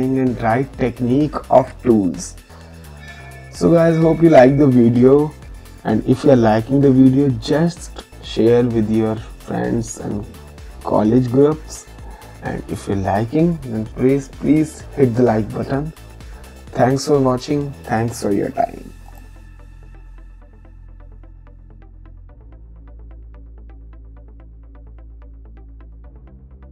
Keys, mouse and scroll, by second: 14.6 click, 16.4 click, 19.1 click.